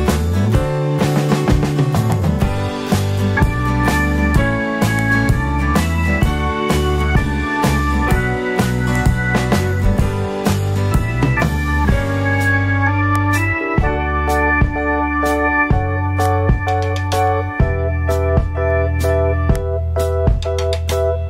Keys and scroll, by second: 2.7 super+0.